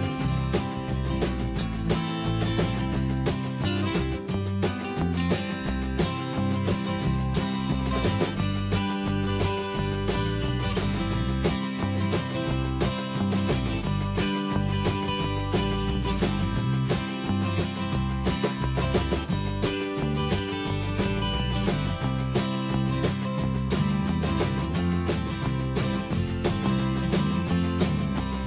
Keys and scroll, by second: 1.5 BackSpace, 1.8 shift+Return, 2.5 shift+BackSpace, 2.9 shift+Return, 3.4 BackSpace, 3.7 Return, 5.2 ctrl+a, 11.3 Return, 12.1 Escape, 24.4 ctrl+g.